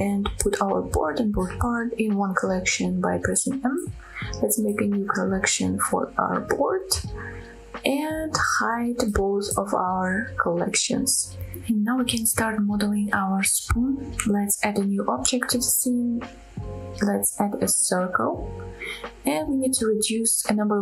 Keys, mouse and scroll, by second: 1.1 click, 1.8 shift+click, 3.5 m, 10.4 click, 11.3 click, 12.2-12.9 scroll up 2, 12.3 middle click, 13.0 shift+middle drag, 14.7 shift+a, 20.2-20.8 drag.